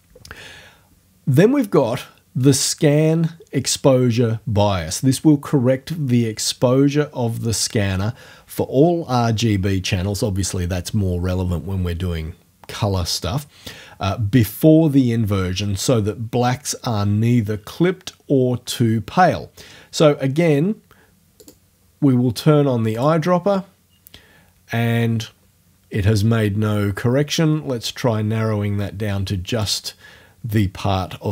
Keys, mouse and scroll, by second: 21.4 click, 23.0 click, 27.4-29.8 drag.